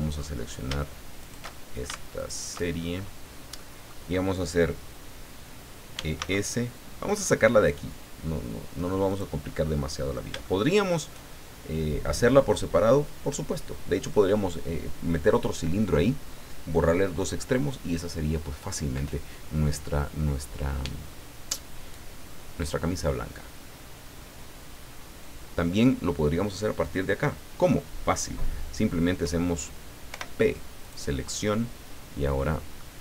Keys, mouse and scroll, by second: 0.1-0.5 alt+shift+scroll up 3, 1.2 alt+shift+right click, 2.1 alt+shift+right click, 2.8-3.3 alt+shift+scroll down 3, 3.5 click, 5.7-6.6 typing, 9.1 click, 9.4 middle click, 10.3 shift+click, 10.4 shift+click, 30.1 p, 30.8 click, 32.3 middle click.